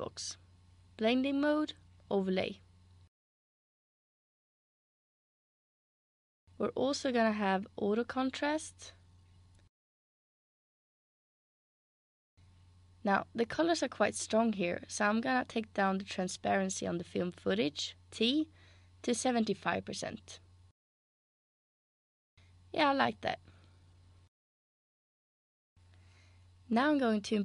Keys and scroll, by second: 7.0-9.3 typing, 10.4 typing, 18.3 t, 20.3-20.7 typing, 21.5 Return.